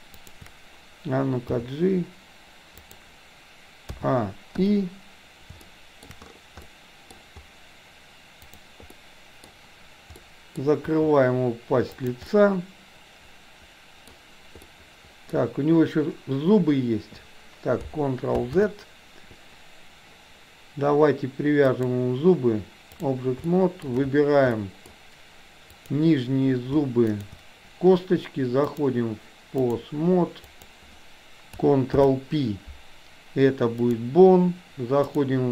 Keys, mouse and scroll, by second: 1.5 g, 4.0 a, 4.7 i, 5.7-6.0 shift+middle drag, 6.7-7.2 middle drag, 9.0-9.5 middle drag, 10.3-10.7 middle drag, 10.9 r, 12.3-14.2 middle drag, 14.7 middle click, 18.4 ctrl+z, 21.8-23.0 drag, 23.5 shift+middle click, 24.5 middle click, 25.8 click, 27.2 shift+click, 28.7-29.8 drag, 30.5 click, 32.0 ctrl+p, 35.2 click.